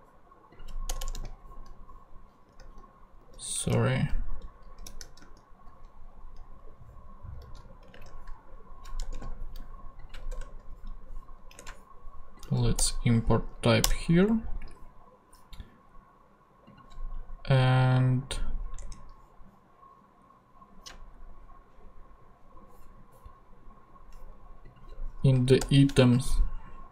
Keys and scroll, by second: 0.9 Return, 2.6 super+z, 3.6 ctrl+super+z, 3.6 ctrl+super+Tab, 4.3 ctrl+Tab, 4.8 super+z, 7.4 super+x, 7.9 ctrl+super+Tab, 8.6 ctrl+Tab, 9.0 ctrl+Return, 12.5 ctrl+alt+Tab, 12.8 alt+Return, 14.2 Return, 18.8 ctrl+Tab, 25.3 Up, 25.6 Return.